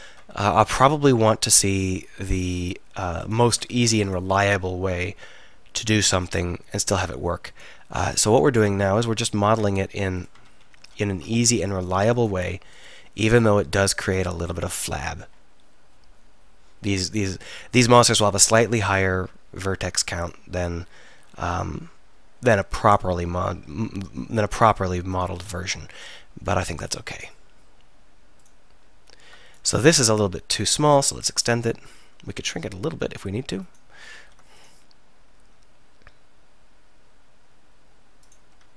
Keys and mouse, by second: 0.4 ctrl+r, 3.6 ctrl+r, 8.2 ctrl+r, 9.5 click, 10.5 ctrl+z, 10.9 ctrl+r, 13.2 s, 17.9 ctrl+r, 21.1 ctrl+r, 23.6 ctrl+r, 26.1 s, 28.5-29.6 drag, 31.5-32.6 drag, 32.6 s, 33.8 click, 34.2 ctrl+r.